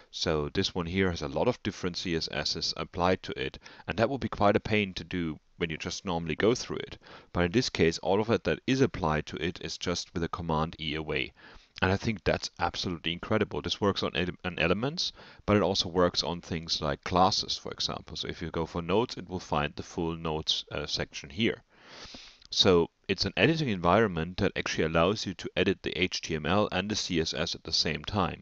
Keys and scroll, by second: 1.7 alt+Down, 7.0 alt+Up, 10.4 super+e, 11.0 Down, 12.2 Up, 13.1 super+e, 15.1 Escape, 15.6 Right, 17.6 super+e, 18.8 Down, 19.3 Up, 19.6 Right, 20.9 Escape, 21.4 Down, 23.5 super+e.